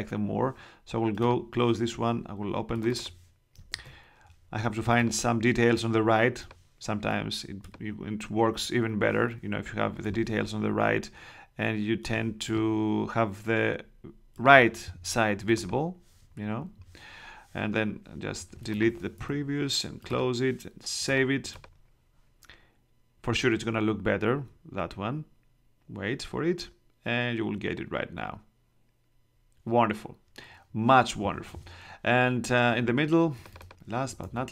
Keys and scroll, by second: 3.7 super+Tab, 19.1 BackSpace, 34.2 super+Tab.